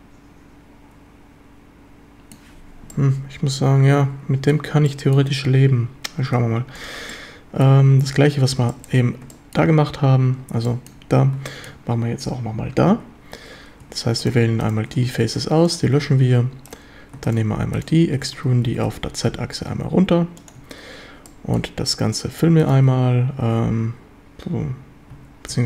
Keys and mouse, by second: 2.9-4.5 middle drag, 4.9 middle drag, 6.8 click, 7.1-7.6 middle drag, 8.7 shift+middle drag, 9.3 shift+middle drag, 10.7 shift+drag, 11.5 shift+drag, 12.9 Tab, 13.8 3, 15.1 x, 16.0 1, 18.1 e, 18.4 Escape, 18.7 g, 18.9 z, 20.4 ctrl+click, 21.3-21.6 drag, 25.2 a, 25.5 a.